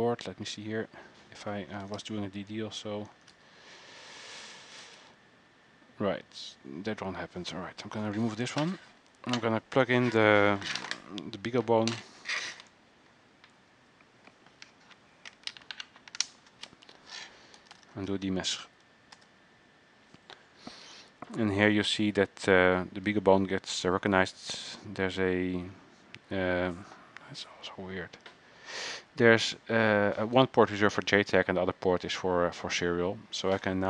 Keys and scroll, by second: 0.0 alt+Tab, 2.0 ctrl+a, 3.3 ctrl+a, 3.5 n, 5.0 ctrl+a, 5.1 n, 17.5-18.6 typing, 19.3 Return.